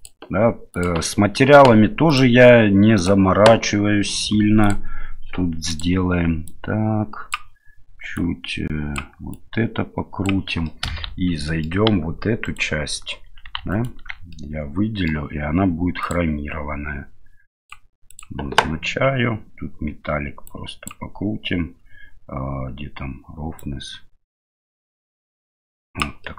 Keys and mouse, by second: 0.8 click, 3.1 click, 4.6 click, 5.7 click, 8.2 click, 9.3-10.3 drag, 10.7 middle click, 11.0 Tab, 11.5 middle click, 12.4 alt+right click, 13.5 3, 14.3 middle click, 17.6 click, 18.2 click, 20.5 click, 23.6-26.0 drag, 26.2 middle click.